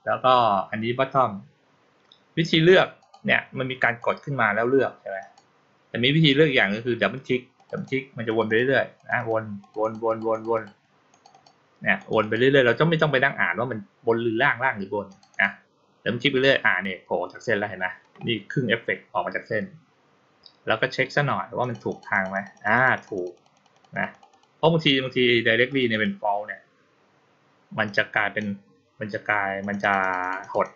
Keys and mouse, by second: 2.8 click, 3.7 click, 5.1 click, 7.4 click, 7.6 click, 8.1 click, 8.3 click, 8.8 click, 9.0 click, 9.5 click, 9.7 click, 9.9 click, 10.2 click, 10.4 click, 11.0 click, 11.2 click, 11.8 click, 12.1 click, 15.0 click, 15.2 click, 21.5 click, 21.7 click, 22.0 click, 22.2 click, 22.4 click, 22.6 click, 22.8 click, 23.0 click, 23.2 click, 23.4 click, 23.6 click, 23.8 click, 24.0 click, 24.2 click, 25.5 click, 25.8 click, 27.7-28.2 drag, 29.5 click, 29.7 click, 29.9 click, 30.1 click, 30.3 click, 30.5 click, 30.7 click.